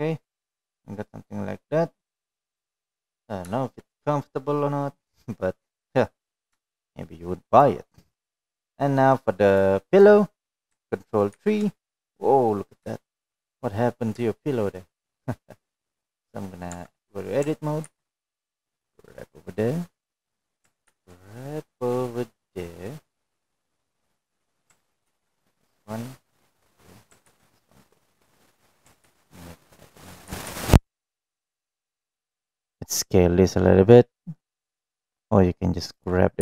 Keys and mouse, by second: 0.5 click, 0.8 Tab, 1.1-1.5 middle drag, 2.4-4.0 middle drag, 4.5-5.5 middle drag, 6.4-7.0 middle drag, 7.4-7.9 middle drag, 8.5-8.8 middle drag, 9.1 shift+middle drag, 12.5 click, 13.9 ctrl+3, 14.4-15.0 middle drag, 15.5 shift+middle drag, 15.9-16.5 middle drag, 16.8 shift+middle click, 19.3 Tab, 20.4 ctrl+r, 26.5 middle click, 27.7 ctrl+r, 29.9 ctrl+r, 31.7 ctrl+r, 35.8 click, 36.2 g.